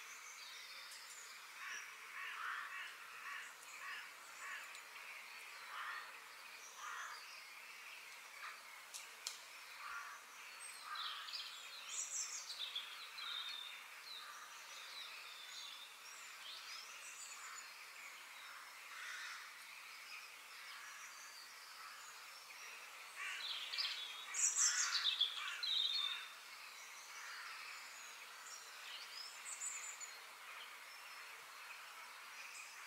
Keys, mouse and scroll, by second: 0.4-1.9 middle drag, 1.9 click, 2.6 shift+click, 3.2 g, 7.9-9.8 middle drag, 10.7 click, 11.2-11.7 scroll down 3, 11.7 shift+middle click, 12.7-14.1 scroll down 1, 14.2 shift+middle click, 14.8-15.2 scroll up 3, 15.2 shift+middle click, 16.0-16.6 scroll down 2, 16.6-17.8 middle drag, 17.8 click, 20.3 f.